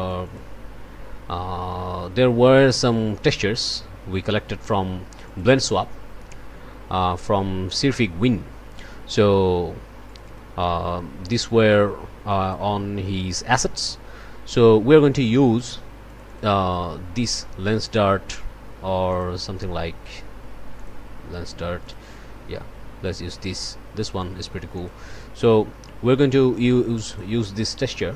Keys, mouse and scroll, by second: 5.2 click, 10.1 click, 12.3 click, 14.4 click, 16.0 click, 19.1 click, 20.8 click, 21.8 click, 24.7 click, 26.4-27.4 drag, 27.7-28.0 scroll up 1.